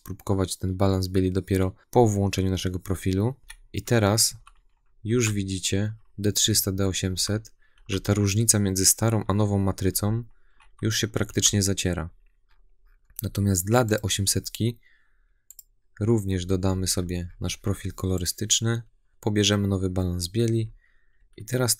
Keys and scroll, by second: 3.4 Right, 4.1 Left, 4.9 Right, 5.6 Left, 6.2 Right, 6.9 Left, 7.6 Right, 9.0 Left, 9.8 Right, 10.5 Left, 11.1 Right, 19.1 Right, 19.8 Left, 20.4 Right, 21.0 Left, 21.6 Right.